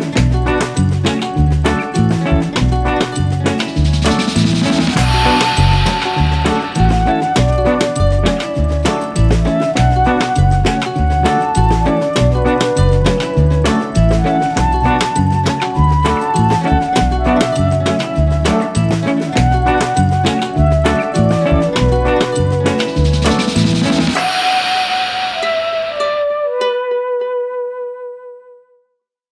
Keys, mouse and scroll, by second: 0.3 scroll down 1, 0.5-1.9 middle drag, 1.9 shift+d, 4.8 scroll up 1, 5.1-6.4 middle drag, 6.4 g, 13.2 scroll up 1, 13.4 click, 13.9 scroll down 2, 14.2 middle click, 14.7-15.1 scroll up 1, 15.1 click, 15.7 g, 17.7 click, 18.0 scroll down 1, 18.3-22.1 middle drag, 22.2 scroll down 1, 22.5 shift+middle click, 22.9 click, 23.4 g, 25.2 click, 25.7 scroll down 1, 25.9-28.4 middle drag.